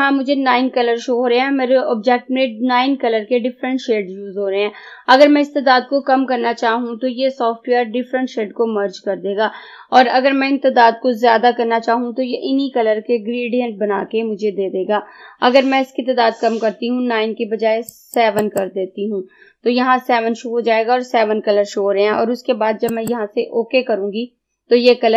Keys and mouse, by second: 17.9 click, 23.0 click.